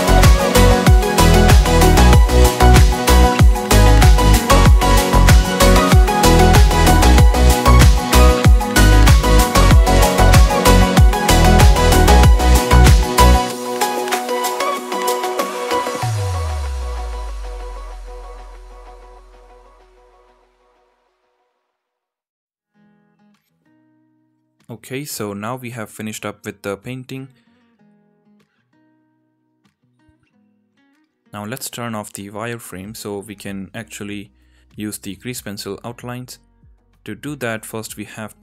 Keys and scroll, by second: 2.8 alt+q, 3.4 ], 4.3 ctrl+z, 4.5 Tab, 4.7 Tab, 6.2 ctrl+z, 13.6 Tab, 16.6 alt+q, 17.1 Tab, 23.4 Tab, 25.4 n, 37.2 KP_0, 38.0 n.